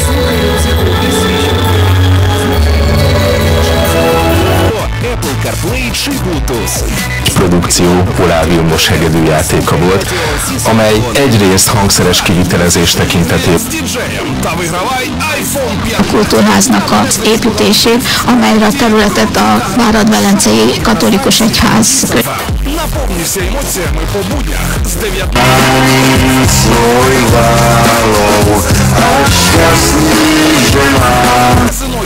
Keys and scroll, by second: 4.7 Page_Down, 14.4 Page_Down, 22.7 Page_Down, 31.7 Page_Down.